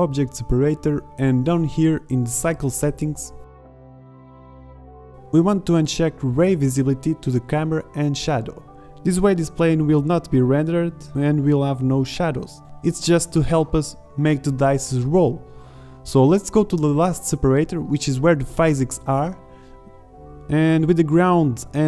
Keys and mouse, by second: 4.7-7.7 drag, 8.0 shift+z, 11.2 z, 11.9 z, 13.3-14.9 middle drag, 16.1-21.8 drag.